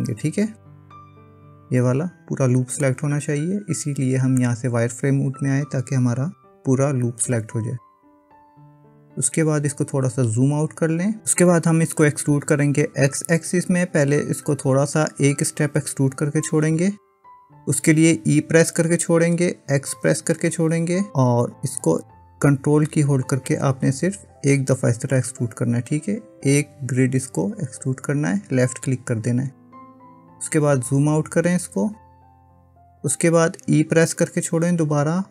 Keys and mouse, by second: 1.1-2.8 middle drag, 6.0 KP_1, 18.9 e, 34.4 e.